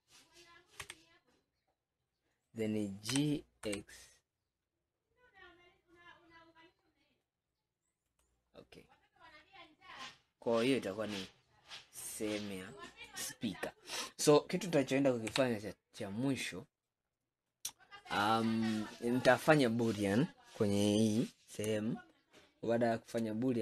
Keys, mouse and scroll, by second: 0.9 a, 1.3 scroll down 2, 3.2 g, 8.6-10.2 scroll down 11, 10.4 scroll up 5, 11.1-11.6 scroll down 2, 12.5-15.4 scroll up 16, 15.4 KP_3, 21.9-23.6 shift+middle drag.